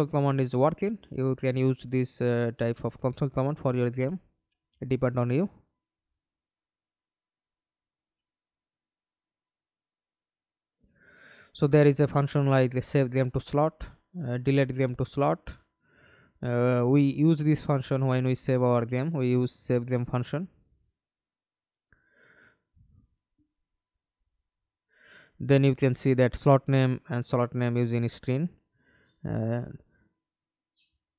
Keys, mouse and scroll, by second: 0.0-1.0 w, 1.4 w, 1.4 w, 3.1 Escape, 3.1 middle click, 3.8 F11, 7.1 right click, 8.4 right click, 9.7-13.0 typing, 13.0 Return, 15.7 right click, 16.5 right click, 16.7-18.4 typing, 19.6 Return.